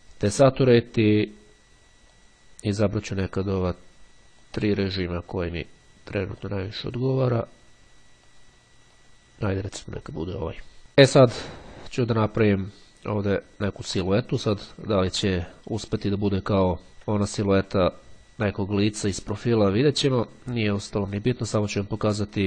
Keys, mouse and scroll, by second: 1.3 click, 2.3-3.3 drag, 3.5 click, 4.6 click, 6.6 click, 7.3 click, 8.3-9.7 drag, 10.4 click, 18.1-18.7 ctrl+scroll up 2, 22.3-22.4 scroll up 2.